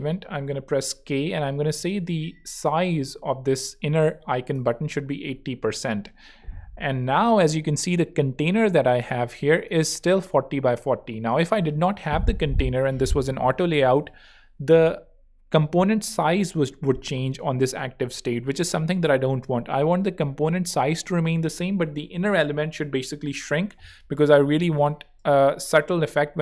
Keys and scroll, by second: 0.3-2.4 typing, 4.4 Home, 24.9 shift+e.